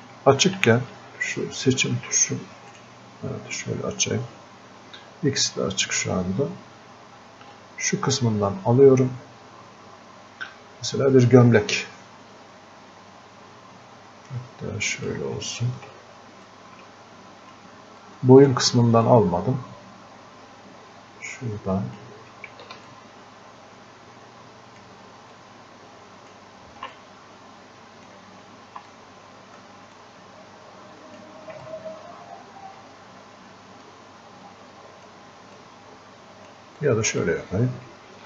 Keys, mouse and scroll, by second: 7.6-16.5 ctrl+drag, 16.5-18.1 drag, 18.1 click, 19.1-22.9 drag, 22.9-25.4 ctrl+drag, 25.4-27.0 ctrl+drag, 27.0-30.0 drag, 30.0-31.7 ctrl+drag, 31.7-35.6 drag, 35.6 click, 36.8-38.2 drag.